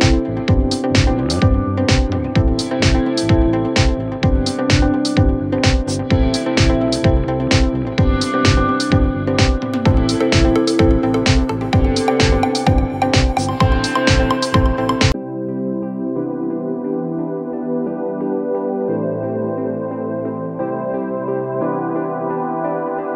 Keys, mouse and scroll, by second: 12.4 ctrl+0.